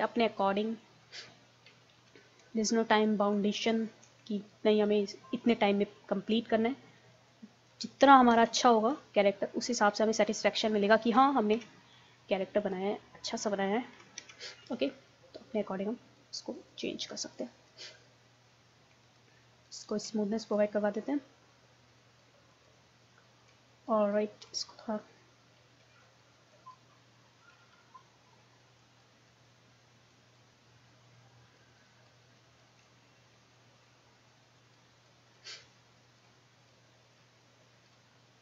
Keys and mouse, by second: 2.0 ctrl+z, 2.1 click, 3.0-5.4 drag, 5.4 middle click, 7.1-8.5 middle drag, 8.5 ctrl+z, 9.2-10.2 middle drag, 10.3-12.0 drag, 11.5 ctrl+z, 12.0 middle click, 12.6-14.4 drag, 14.2 ctrl+z, 17.8-26.2 middle drag, 26.4-27.8 middle drag, 27.8 click, 28.8-32.9 drag, 32.9-38.4 middle drag.